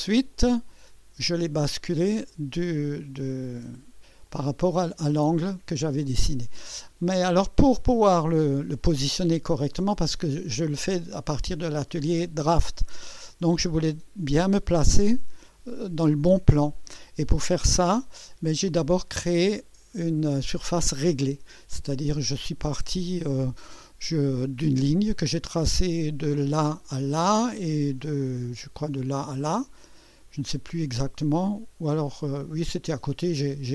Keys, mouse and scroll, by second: 0.4-1.2 drag, 2.3 click, 4.3 click, 6.2-7.3 drag, 8.2 click, 8.9 click, 19.9 click, 20.8 space, 21.9-23.2 drag, 27.6 click, 29.7-30.8 drag, 32.6-33.1 drag.